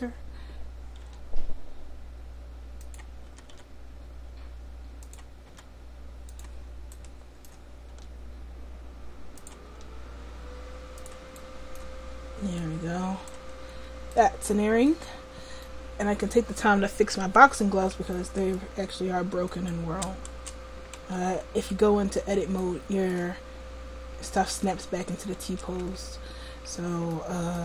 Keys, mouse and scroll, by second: 1.1 r, 3.4 r, 5.6 r, 7.9 r, 9.7 r, 12.6-13.8 drag, 19.8 Tab, 20.4 Tab, 21.0 Tab, 25.5 Tab.